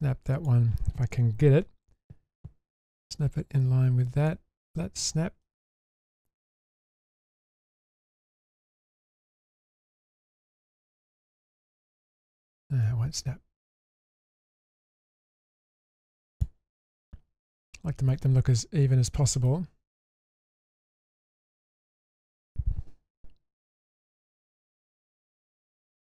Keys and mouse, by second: 1.5 ctrl+z, 2.7-4.3 drag, 4.7-5.4 middle drag, 5.9-6.5 drag, 7.3-8.7 drag, 10.2 click, 11.1 ctrl+shift+z, 11.6 ctrl+z, 12.3 middle click, 12.9-14.2 drag, 14.5-15.1 middle drag, 15.8-16.1 middle drag, 16.4 click, 16.8-17.6 middle drag, 18.1-19.5 middle drag, 21.2-22.4 middle drag, 23.7 1, 24.5 shift+middle drag, 25.0 middle drag, 25.5-25.9 shift+middle drag.